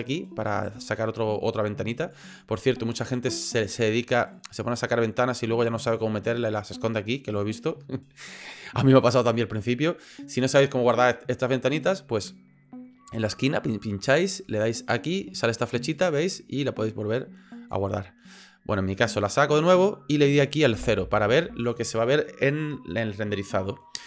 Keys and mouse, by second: 0.0-2.1 drag, 4.3-6.0 drag, 6.1-7.4 drag, 8.9 click, 13.7-15.9 drag, 17.3 click, 18.9 click, 20.7 KP_0.